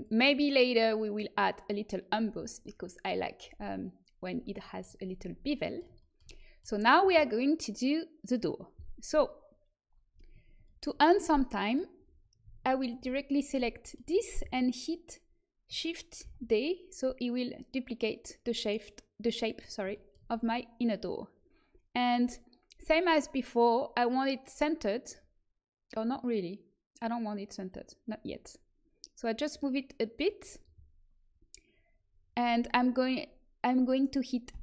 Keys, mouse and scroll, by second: 0.8-7.6 middle drag, 10.6-11.7 middle drag, 12.6-16.2 right drag, 16.2 shift+d, 27.6-30.2 drag, 34.4 f.